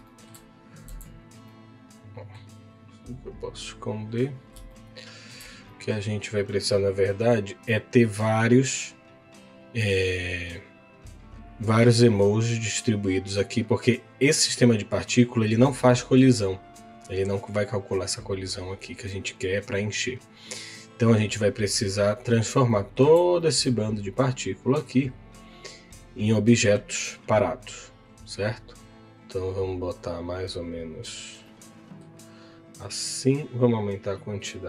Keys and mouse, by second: 0.1 shift+middle click, 0.8 z, 1.4 middle click, 3.7 click, 4.7 shift+middle click, 5.6 middle click, 6.4 middle click, 8.5-12.9 drag, 22.7 shift+middle click, 23.4 middle click, 27.5-31.2 drag, 31.4 middle click.